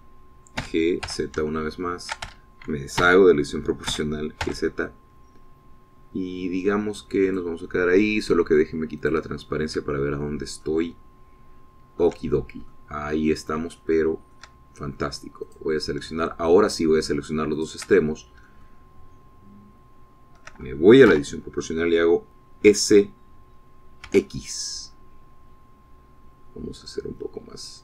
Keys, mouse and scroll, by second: 0.5 a, 1.7 g, 2.1 z, 3.3 Escape, 4.0 o, 5.0 g, 5.5 z, 8.3 click, 10.1 click, 11.0-13.3 shift+middle drag, 13.8-14.8 middle drag, 14.9 shift+middle click, 16.5 click, 17.3 shift+middle click, 18.6 shift+click, 19.0 shift+middle click, 19.4-21.6 shift+drag, 22.1 o, 23.7 s, 25.1 x, 27.0-27.7 scroll down 4.